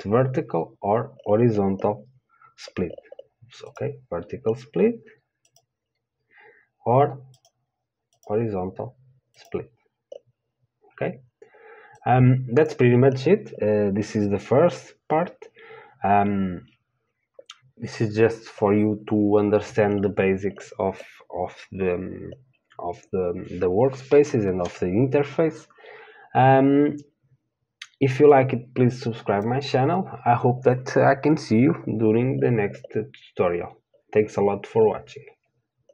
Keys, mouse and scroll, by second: 8.5-9.7 right drag, 12.4-35.9 drag.